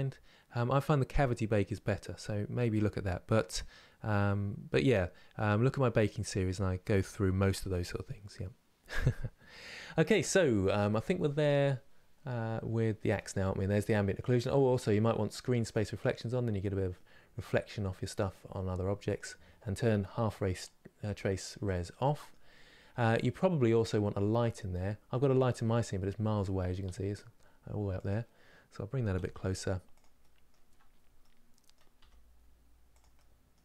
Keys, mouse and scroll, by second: 15.3 click, 16.1 scroll up 2, 16.6-20.2 middle drag, 20.2 click, 21.6 middle click, 22.2 scroll down 2, 24.7 scroll down 8, 27.7 click, 28.8 g, 29.9 middle click, 30.4 scroll up 2, 30.9 middle click, 31.6 g, 32.8 middle click, 33.5-33.6 scroll up 10.